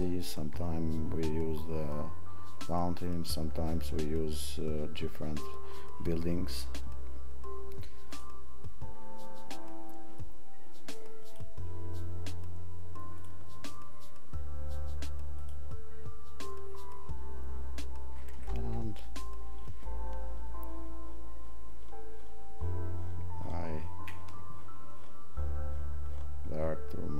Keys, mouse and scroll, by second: 0.2 click.